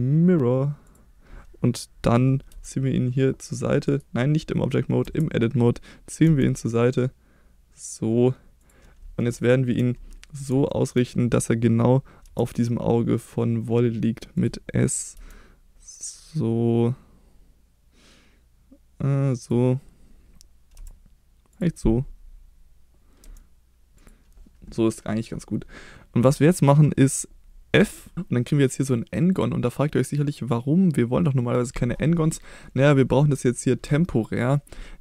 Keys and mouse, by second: 2.5 g, 3.9 right click, 5.0 Tab, 6.2 g, 8.6 click, 9.4 shift+middle click, 10.7 shift+middle click, 12.2 s, 14.3 click, 15.1 g, 19.4 click, 20.7 s, 21.5 click, 23.2 g, 23.9 click, 27.8 f.